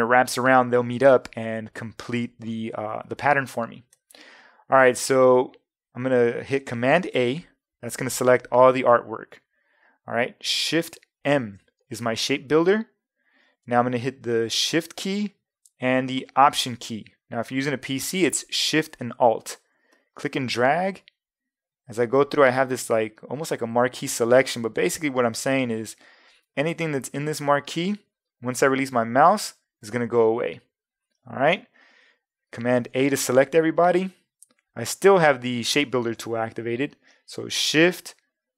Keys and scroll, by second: 7.0 super+a, 11.2 shift+m, 32.8 super+a.